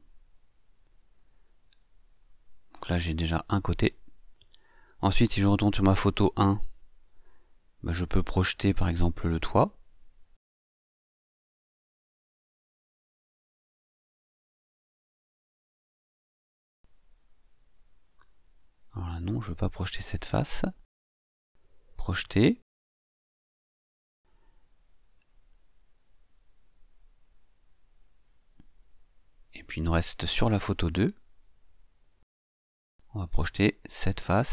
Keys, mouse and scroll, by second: 0.1 click, 1.3-5.0 middle drag, 5.9 click, 9.2 click, 11.8 shift+click, 13.3 shift+click, 17.5 shift+click, 18.4 shift+click, 19.7 shift+click, 20.5 shift+click, 22.6 click, 23.9 click, 23.9 scroll up 2, 26.7 scroll up 1, 26.8-27.5 scroll down 4, 28.5 click, 30.4 click, 34.0 click.